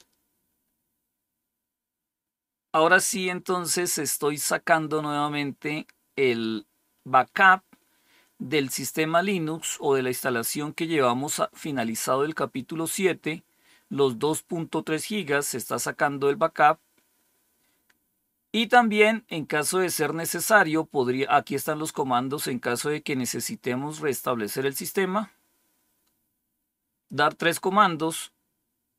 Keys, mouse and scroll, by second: 16.5-17.3 scroll down 1, 17.3-18.0 scroll down 1, 18.0-18.8 scroll down 1, 18.8-19.9 scroll up 2, 19.9-24.3 scroll down 2, 24.3-27.0 drag.